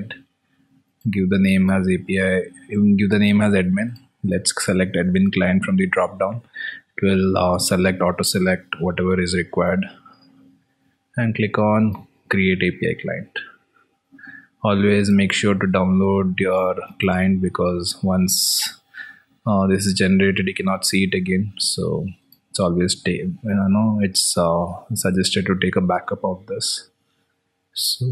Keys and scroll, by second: 16.4 alt+Tab, 25.8 ctrl+v, 26.9 alt+Tab.